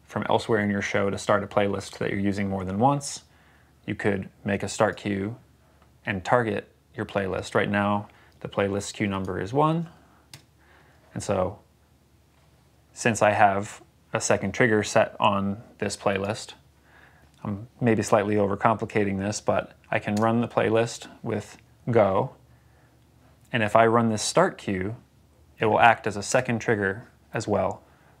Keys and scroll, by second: 9.4 1, 10.2 Return, 20.1 space, 26.2 space.